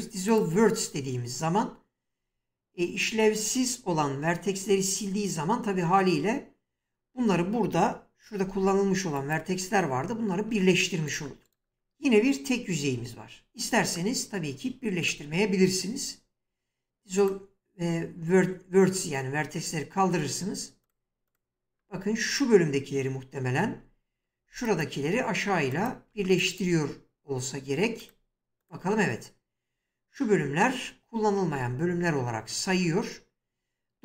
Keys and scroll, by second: 8.4 <, 12.8 ctrl+z, 23.7 <, 26.6 <, 31.5 1.